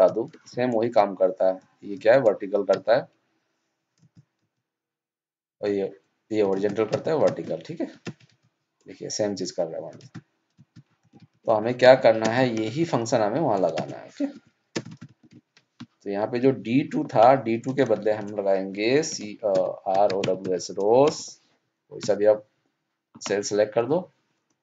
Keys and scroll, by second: 0.3 ctrl+c, 7.2 ctrl+shift+Down, 11.1 ctrl+shift+Right, 13.7 ctrl+shift+Down.